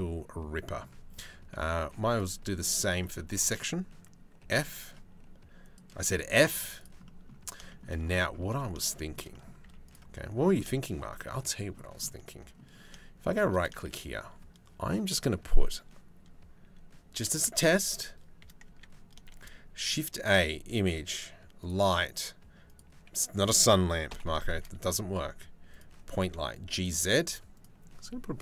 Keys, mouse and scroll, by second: 0.8 Tab, 1.4 2, 1.7 click, 2.3 click, 2.6 middle click, 4.0 g, 5.7 f, 6.1 z, 6.7 middle click, 7.3 shift+middle click, 8.2 middle click, 8.6 shift+middle click, 8.9 middle click, 9.2 z, 9.7 middle click, 10.3 shift+middle click, 11.0 middle click, 13.4 shift+a, 17.1 shift+a, 18.3 Tab, 18.9 shift+a, 23.8 Delete, 24.1 shift+a, 25.7 g, 27.2 click.